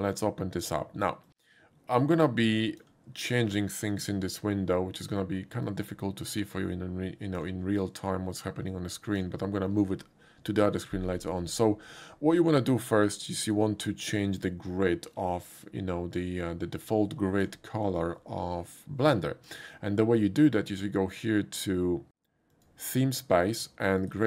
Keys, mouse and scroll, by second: 1.2-2.8 drag, 3.9-4.3 drag, 5.6 click, 7.0 click, 8.0-9.2 drag, 16.9 click, 18.8 click, 19.9 scroll down 1, 22.5 click, 24.0 click.